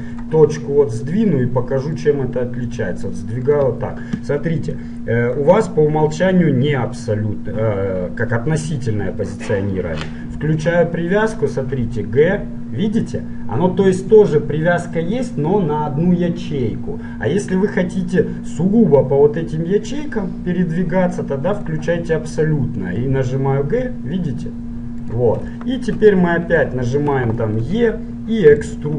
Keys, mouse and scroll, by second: 2.1-4.1 drag, 2.9 g, 4.9-6.8 drag, 10.7-12.8 drag, 11.9 g, 21.7-23.7 drag, 23.3 g, 25.7-28.7 middle drag, 27.9 e.